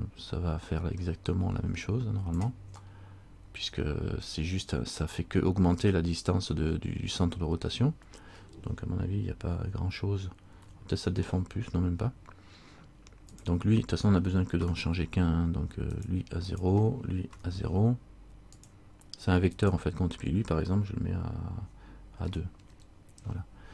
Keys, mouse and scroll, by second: 3.0 middle click, 10.7 KP_1, 13.5 click, 16.6 click, 19.7 click.